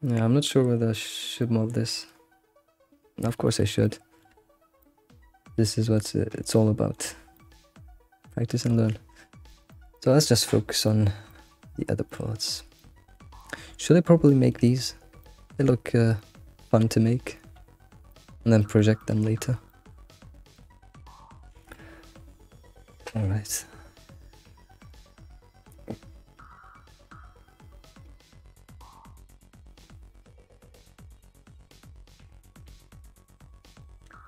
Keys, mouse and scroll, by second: 1.0-1.4 scroll down 2, 1.4-2.3 middle drag, 2.3-3.2 scroll down 1, 3.2 scroll down 2, 3.4 alt+middle click, 3.8 shift+middle click, 4.4-4.8 scroll up 3, 4.8-7.1 shift+middle drag, 7.1 scroll down 3, 7.3-9.1 shift+middle drag, 9.1 scroll down 3, 9.7 alt+middle click, 10.3 shift+middle click, 10.5-10.8 scroll up 2, 10.8 middle click, 11.7-12.5 scroll up 4, 12.1 alt+middle click, 12.7-14.7 middle drag, 14.8-15.2 scroll up 2, 15.2-16.6 shift+middle drag, 16.6 scroll down 1, 17.6-18.1 scroll down 14, 18.1-19.1 shift+middle drag, 19.2-19.7 scroll up 7, 19.7 middle click, 20.2 Tab, 20.6 click, 21.1 scroll down 1, 21.3 click, 21.6 ctrl+s, 21.8-23.2 middle drag, 23.3 middle click, 24.5 middle drag, 32.0-34.2 shift+middle drag.